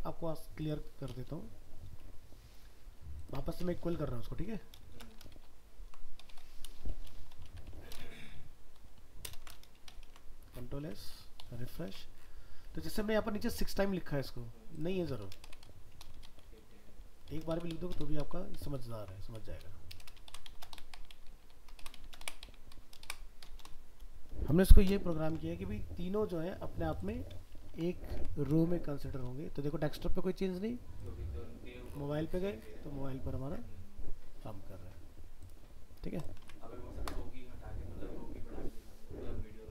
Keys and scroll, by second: 5.3 ctrl+shift+Left, 8.1 ctrl+Left, 9.3 ctrl+BackSpace, 10.1 ctrl+s, 10.8 alt+Tab, 18.9 ctrl+Right, 25.3 ctrl+s, 28.2 alt+Tab, 36.4 alt+Tab.